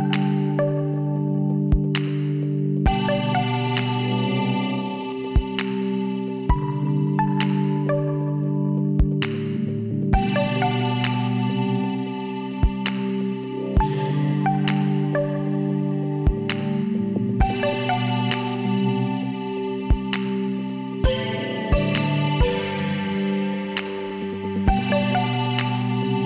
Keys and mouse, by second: 0.8 s, 2.1 z, 4.6 s, 7.7-9.5 middle drag, 9.7 s, 13.3 z, 13.8 middle click, 14.2 middle click, 16.3-19.1 drag, 18.5 e, 20.6-22.2 drag, 22.2 s, 24.0-25.4 middle drag.